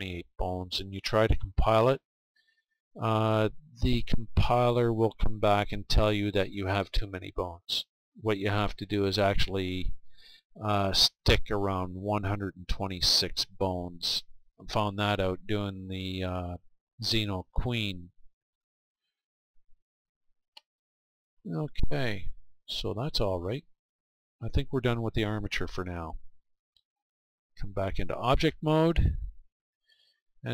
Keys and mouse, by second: 18.5-22.1 middle drag, 25.2-26.5 middle drag, 26.5-29.9 drag, 29.9-30.5 middle drag.